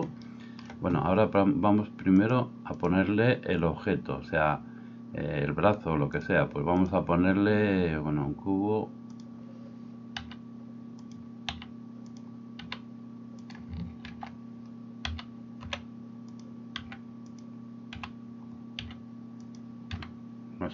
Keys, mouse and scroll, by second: 10.2 s, 11.2-20.7 middle drag, 11.6 s, 12.6 s, 14.1 ctrl+2, 15.1 s, 16.9 g, 17.9 e, 18.8 s, 19.9 r.